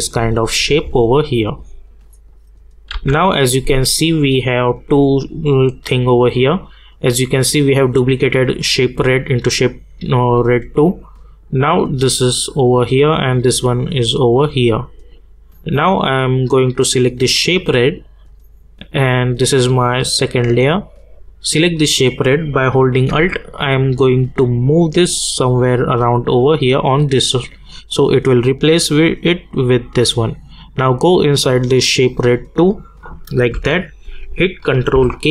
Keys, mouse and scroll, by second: 1.4 click, 2.9 u, 4.7 click, 8.7 click, 11.6 click, 17.2 click, 23.1 alt+Num_Lock, 23.1 click, 24.0-27.6 alt+drag, 33.5 u, 34.9 ctrl+k.